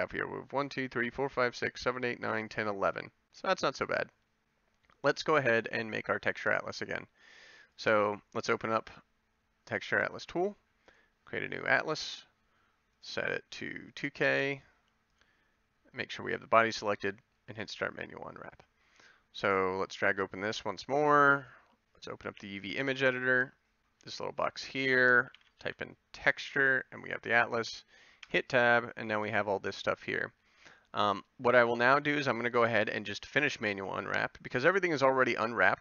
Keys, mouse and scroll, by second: 19.8 middle click, 28.3 Tab.